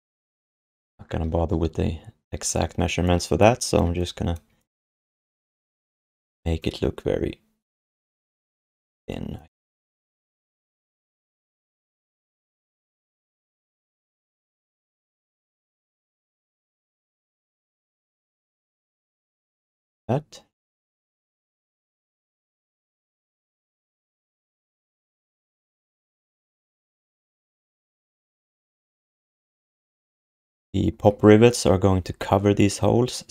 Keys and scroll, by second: 0.3 w, 2.6 x, 3.8 q, 4.4 w, 8.2 q, 15.0 q, 16.6 w, 18.2 q, 19.6 alt+shift+d, 19.9 ctrl+s, 21.8 ctrl+alt+r, 24.6 f, 25.7 alt+shift+d, 25.9 ctrl+s.